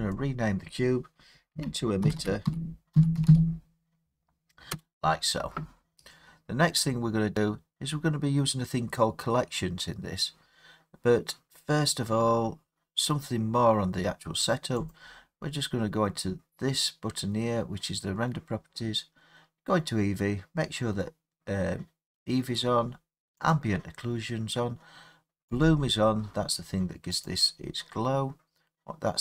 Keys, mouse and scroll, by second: 0.1 click, 1.5-3.2 typing, 4.7 Return, 7.7 middle click, 7.9 middle click, 8.0 middle click, 9.8-13.1 middle drag, 14.9-20.0 drag, 23.5-25.8 drag, 28.5 click.